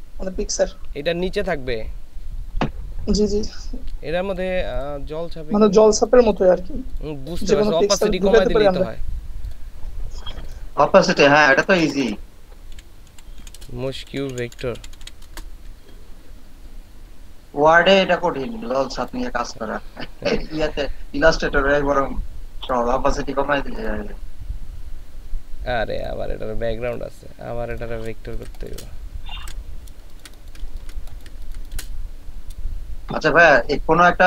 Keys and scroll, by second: 11.6-15.2 typing, 28.3 ctrl+space, 29.4 v, 30.1 s.